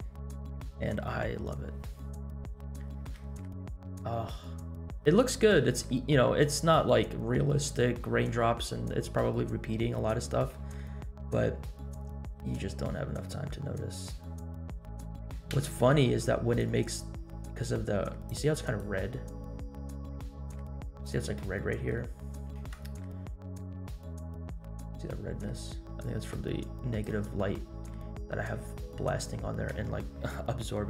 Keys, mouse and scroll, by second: 2.6-3.1 shift+middle drag, 3.4 scroll up 1, 9.9-10.5 middle drag, 11.8-12.3 scroll up 1, 12.5 scroll up 1, 15.5 space, 16.7 click, 18.8-21.2 drag, 21.5-24.3 shift+middle drag, 26.0-27.1 drag, 27.3-28.4 shift+middle drag, 30.0 scroll down 2.